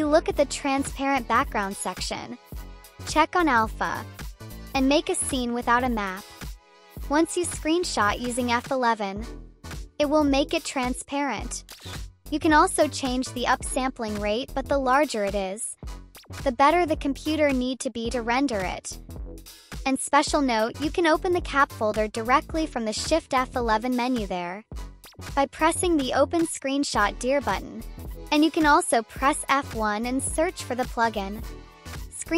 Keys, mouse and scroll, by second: 6.5 click, 6.6 click, 6.7 click, 6.9 click, 7.1 click, 7.3 click, 7.5 click, 7.6 click, 7.8 click, 7.9 click, 8.4 click, 8.7 click, 9.2 click, 9.6 click, 11.2 F11, 13.4 click, 14.3-14.6 drag, 15.2 click, 15.3 click, 17.4-18.4 drag, 23.7 click, 32.2 click.